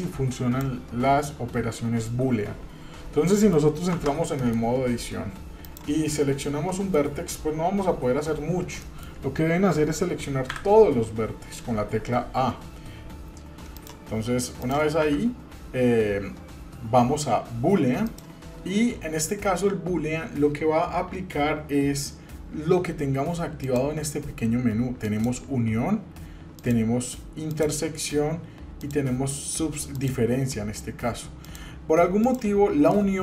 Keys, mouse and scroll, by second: 3.3 middle click, 3.9 Tab, 4.4 middle click, 4.9-5.7 scroll up 1, 5.7 click, 6.4 scroll down 2, 6.7 middle click, 6.7 scroll up 1, 8.8 middle click, 10.5 a, 13.8 click, 14.6 click, 15.0 a, 18.1 click, 23.6-25.2 drag, 26.5-27.6 drag, 28.8-30.1 drag, 31.4 click, 32.9 middle click.